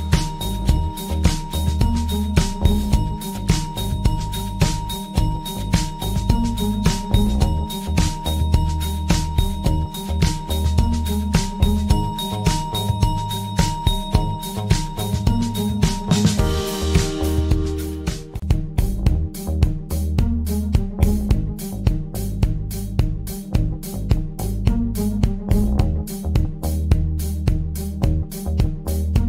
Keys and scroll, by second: 27.2 Down.